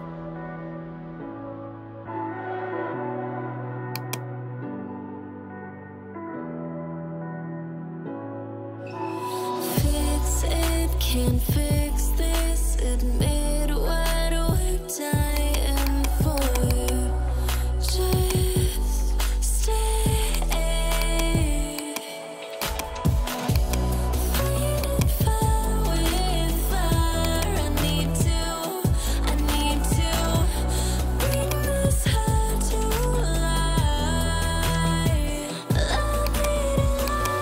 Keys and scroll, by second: 1.5-2.7 typing.